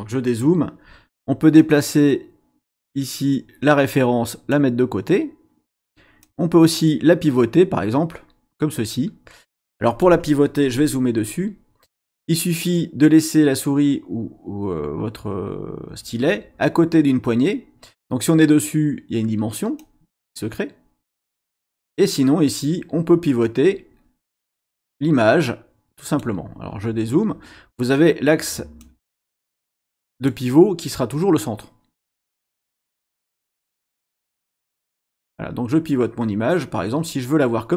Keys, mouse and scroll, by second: 1.5-4.7 drag, 6.2-10.2 drag, 10.6-11.5 scroll up 2, 19.8-21.4 drag, 24.2-26.4 drag, 26.6-26.9 scroll down 1, 28.8-30.5 drag, 34.9-37.3 drag.